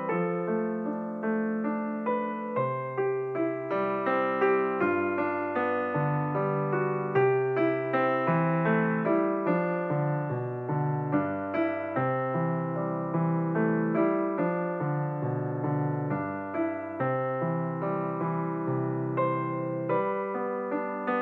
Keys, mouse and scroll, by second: 0.0 ctrl+p, 2.6 click, 7.2-10.2 drag, 10.3-12.2 scroll down 6, 12.2 KP_7, 15.5 s, 20.1-21.2 scroll up 13.